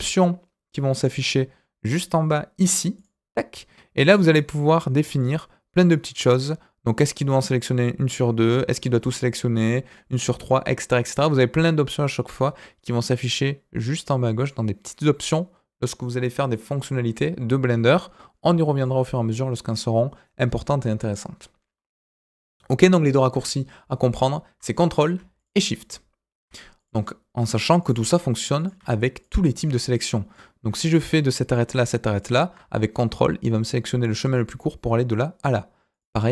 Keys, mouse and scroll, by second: 2.9 click, 5.1-11.3 drag, 14.3 click, 16.5 middle click, 21.8-22.2 scroll up 1, 22.2 click, 22.8 middle click, 24.1 ctrl+click, 24.8 click, 25.3 shift+click, 26.7 click, 27.8 click, 28.5 click, 29.1 shift+click, 29.9 click, 30.3 middle click, 31.3 middle click, 32.1 ctrl+click, 35.9 click.